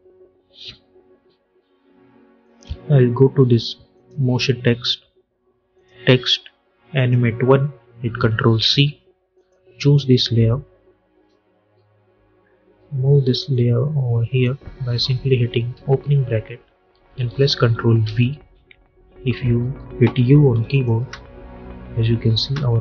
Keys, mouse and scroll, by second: 2.3 click, 8.5 ctrl+c, 9.2 click, 13.4-15.6 drag, 15.6 [, 17.9 ctrl+v, 19.3 u, 20.6 click, 20.9 space.